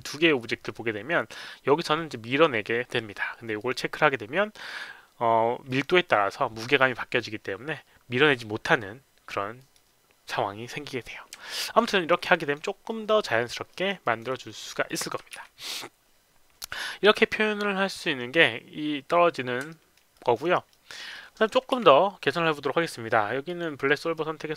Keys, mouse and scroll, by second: 3.6 click, 4.7 click, 5.7 click, 9.6 click, 11.5 alt+click, 11.9 alt+right click, 12.3 alt+click, 12.9 alt+middle click, 13.2 alt+click, 13.7 alt+middle click, 14.0 alt+click, 14.3 alt+right click, 14.6 alt+middle click, 14.9 alt+click, 15.4 q, 19.7 alt+middle click, 20.1 alt+click, 20.4 alt+right click, 20.7 alt+middle click, 21.1 alt+click, 21.7 q, 23.5 click, 23.5 q.